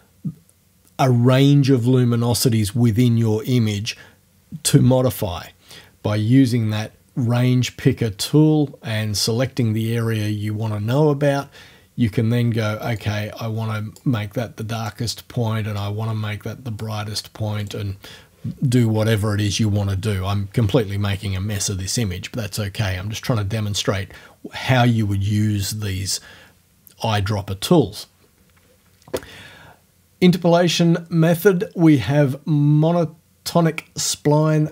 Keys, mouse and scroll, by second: 13.0-14.2 drag, 14.2-15.8 middle drag, 14.8 right click, 15.8-17.0 drag, 17.0 middle click, 17.6 right click, 17.9 middle click, 32.0 click.